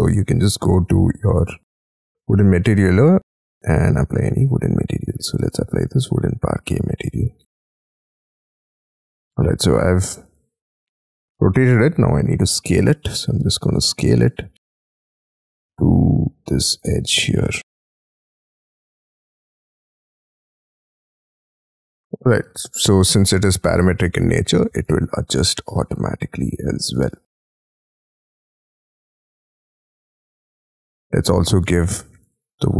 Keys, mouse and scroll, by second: 5.2-5.7 scroll up 9, 6.5 middle click, 7.3-8.4 scroll down 15, 7.4 Escape, 7.7 Escape, 8.1 Escape, 8.4 Escape, 9.0-9.5 scroll down 11, 9.6 middle click, 11.0 scroll down 3, 11.7 s, 13.1-14.2 scroll up 22, 14.9 middle click, 15.5 y, 16.3-17.2 scroll up 15, 21.9 y, 22.2-23.5 scroll down 30, 23.6 middle click, 25.3 middle click, 26.7-29.1 scroll up 46, 29.1 middle click, 31.3 double click, 31.5 double click, 31.7 double click, 31.9 double click, 32.1 double click, 32.3 double click, 32.5 double click, 32.6 double click.